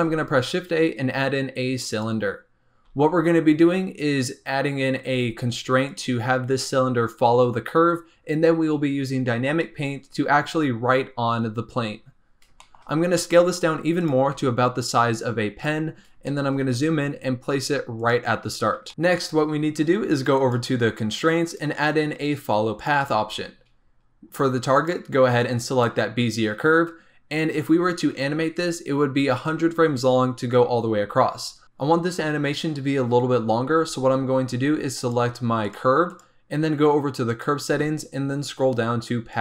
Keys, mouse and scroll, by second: 0.0 shift+a, 2.8 s, 5.0 s, 12.6 shift+middle click, 12.8 scroll up 2, 13.1 s, 14.3 g, 15.8-16.2 scroll up 2, 16.2 shift+middle click, 16.4 shift+scroll up 3, 16.7 g, 18.3-18.9 scroll down 6, 18.9 click, 20.2 click, 21.4-24.4 drag, 24.7-27.7 drag, 29.9 scroll down 3, 30.9-31.6 scroll up 3, 34.9 click, 35.6 click, 36.0 click, 37.2 click, 38.0-39.2 scroll down 12, 39.2 scroll down 1, 39.3 click.